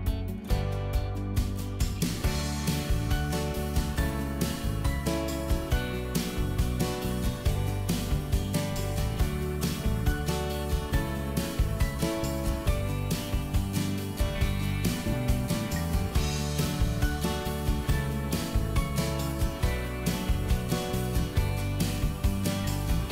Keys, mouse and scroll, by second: 1.2 right click, 1.2 click, 1.5 middle click, 2.1 click, 3.0 Delete, 3.3-4.6 middle drag, 4.6 click, 5.2 Delete, 5.9 click, 6.4 middle click, 7.1 shift+click, 7.4 middle click, 8.0 m, 8.6 ctrl+click, 9.2 shift+middle click, 10.7 click, 11.9 Delete, 12.7 shift+middle click, 13.3-13.8 scroll up 1, 13.8 click, 15.0 right click, 16.3 click, 17.3 middle click, 17.6 right click, 18.9 click, 19.6 middle click, 20.5 click, 22.3 middle click.